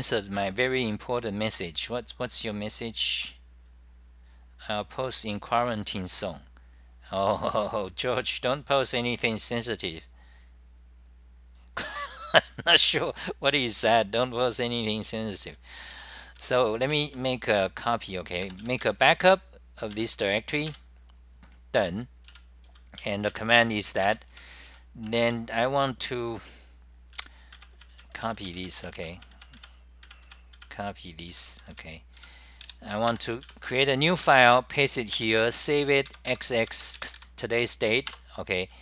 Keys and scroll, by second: 20.7-21.4 typing, 22.5 w, 24.8 t, 27.1-33.2 typing, 35.2 Return, 36.7 Home, 37.6-38.3 typing.